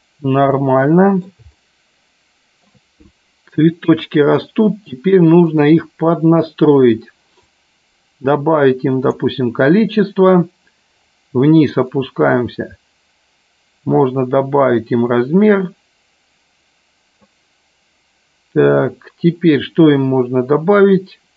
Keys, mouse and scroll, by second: 0.6 middle click, 1.6-2.7 shift+middle drag, 5.5 click, 7.4-9.2 drag, 12.0-17.4 drag.